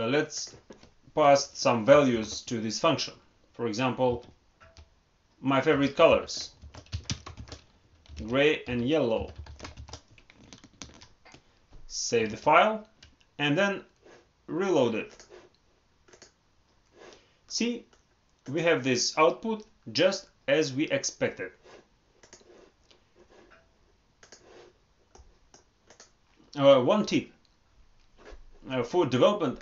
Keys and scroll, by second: 10.8 ctrl+s, 12.2 alt+Tab.